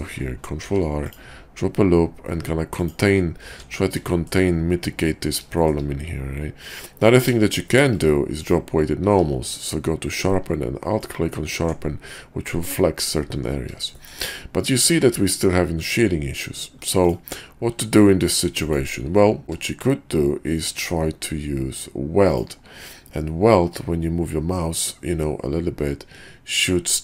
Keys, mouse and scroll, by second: 0.6 ctrl+r, 3.5 Tab, 4.1 shift+drag, 5.5 shift+drag, 6.6 click, 7.6 shift+drag, 9.0 q, 14.0 shift+click, 16.9 click, 17.7 q.